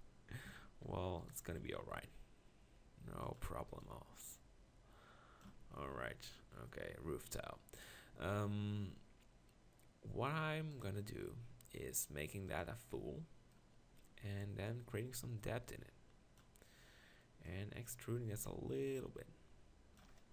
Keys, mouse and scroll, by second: 0.5 Tab, 2.0 r, 5.5 Tab, 6.9 Tab, 8.1 Tab.